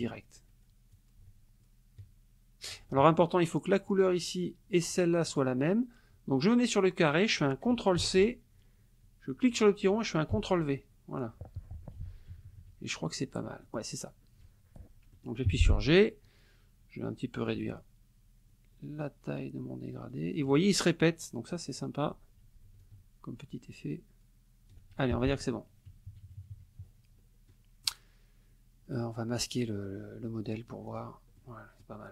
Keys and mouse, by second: 0.9-2.9 ctrl+drag, 3.9 click, 5.3 click, 7.0 click, 8.0 ctrl+c, 9.4 click, 10.3 ctrl+v, 11.9 F1, 12.3 KP_Subtract, 13.6 middle click, 15.1 middle click, 15.5 g, 17.5-20.7 ctrl+drag, 22.8-24.9 ctrl+drag, 25.2 ctrl+F1, 25.3 click, 26.1 KP_Subtract, 27.5 middle click, 30.5 click, 30.9 click, 31.4 middle click.